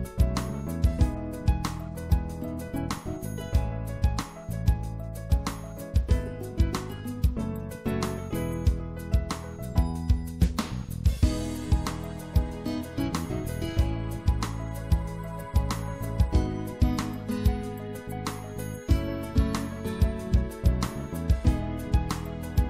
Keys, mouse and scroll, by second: 1.1 right click, 6.4-8.0 shift+drag, 11.9 middle click, 16.4-20.5 middle drag, 18.2 z, 20.5 b.